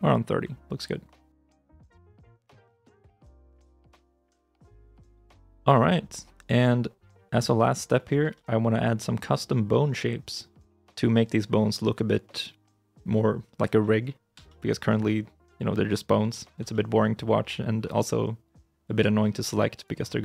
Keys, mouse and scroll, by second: 1.2 alt+r, 1.9 scroll down 1, 2.2 middle click, 4.1-4.5 scroll down 1, 5.0 ctrl+s, 6.3-7.8 scroll down 1, 7.8 middle click, 8.2 shift+middle click, 9.3 middle click, 12.7 right click, 13.8 shift+middle click, 14.2 scroll down 1, 14.3 middle click, 14.7 shift+middle click, 15.3 scroll up 1, 16.9 right click, 18.1 scroll down 1, 19.6-20.1 scroll up 1.